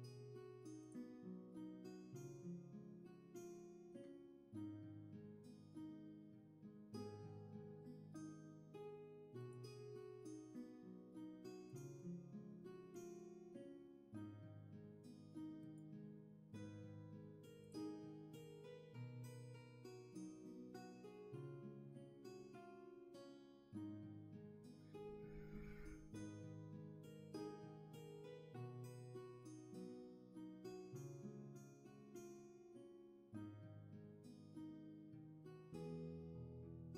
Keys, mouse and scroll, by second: 22.2 ctrl+z.